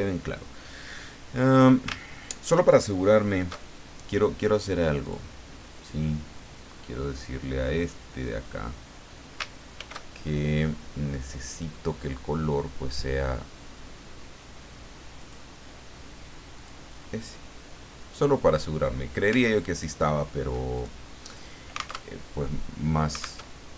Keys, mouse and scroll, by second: 5.0 click, 9.7 ctrl+shift+f, 15.2 click, 16.5 click, 18.4 click, 19.4-19.7 ctrl+scroll up 2, 20.0-20.3 ctrl+scroll down 2, 20.7 ctrl+click, 22.0 alt+Tab, 23.4 alt+Tab.